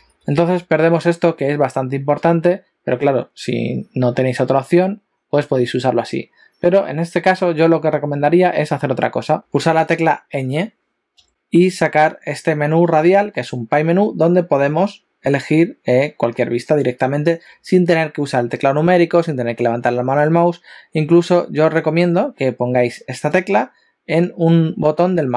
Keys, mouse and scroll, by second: 0.0-0.2 typing.